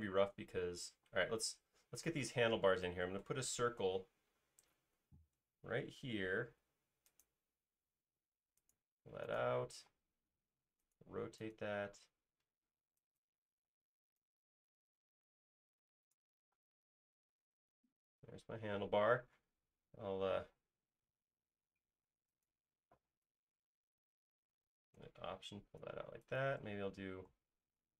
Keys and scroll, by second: 1.4 space, 3.5 c, 5.5 typing, 5.8 Right, 6.5 Left, 9.1 space, 9.8 q, 13.9 p, 16.6 space, 18.6 typing, 20.0-21.0 typing, 22.1-23.0 typing, 26.1 alt+space, 27.3 s.